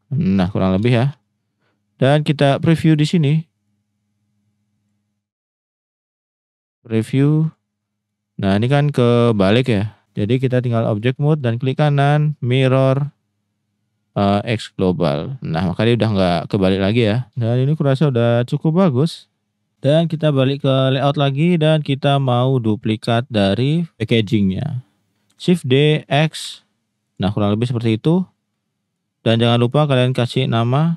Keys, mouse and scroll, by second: 0.9 shift+middle drag, 3.7-4.9 drag, 6.1 click, 8.2 middle click, 9.5 middle click, 10.6-11.0 right drag, 11.6 right click, 11.8-15.2 drag, 15.2-15.6 middle drag, 16.2 middle click, 17.9 middle click, 18.3-18.6 middle drag, 19.0 drag, 20.8 click, 21.4-21.8 drag, 23.2 click, 23.8 middle click, 25.3 shift+d, 26.4 x, 27.0 click, 28.5 middle click, 29.4 click, 30.1-30.9 drag.